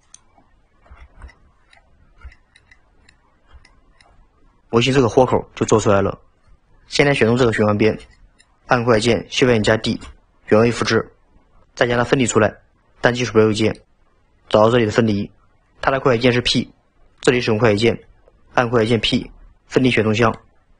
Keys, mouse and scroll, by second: 0.4 scroll down 2, 1.0 alt+z, 1.3 middle click, 1.8-2.3 scroll down 5, 2.3 shift+middle click, 3.2-3.7 scroll up 2, 3.7 shift+middle click, 7.2-7.6 scroll down 2, 7.6-9.9 shift+middle drag, 9.9 shift+d, 13.6-15.2 right drag.